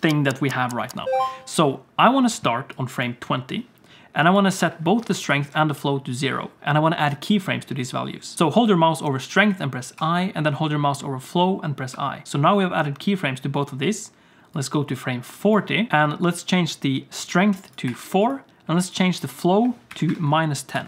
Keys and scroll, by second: 10.0 i, 11.9 i.